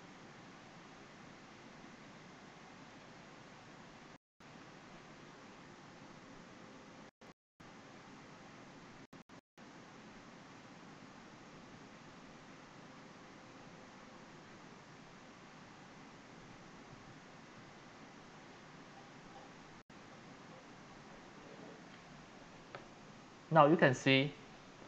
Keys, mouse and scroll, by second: 2.9 alt+middle click, 8.7-11.8 drag, 11.8-16.6 alt+right drag, 23.4 scroll down 1.